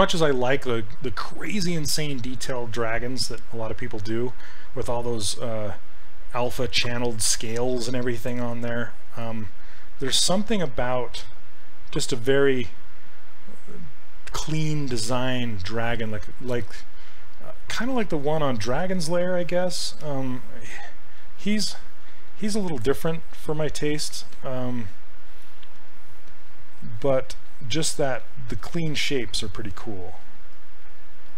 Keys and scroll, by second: 20.7 s, 22.1 s.